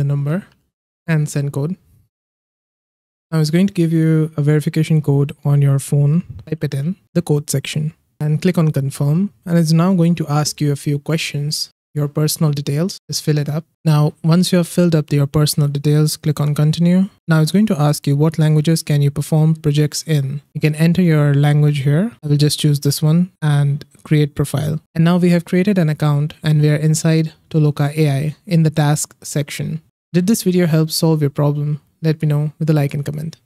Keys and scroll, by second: 0.0-1.2 typing, 6.2-7.2 typing.